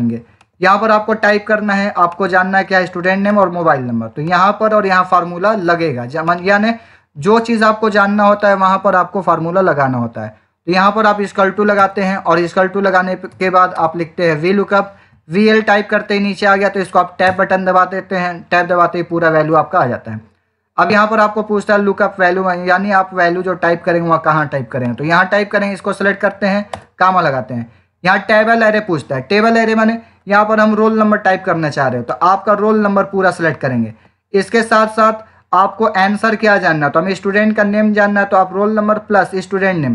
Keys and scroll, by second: 11.7 =, 13.2 v, 13.6 l, 26.6 ,.